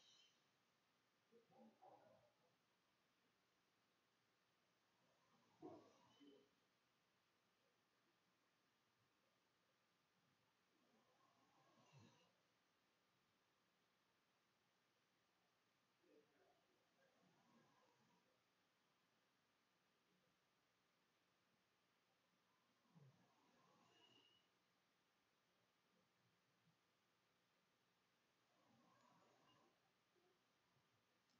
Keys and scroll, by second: 0.7 f, 1.9-9.4 typing, 10.5 w, 15.4-20.9 typing, 23.7-25.2 typing, 26.4 Tab, 27.3 Tab, 27.8-28.9 typing, 29.0 Return.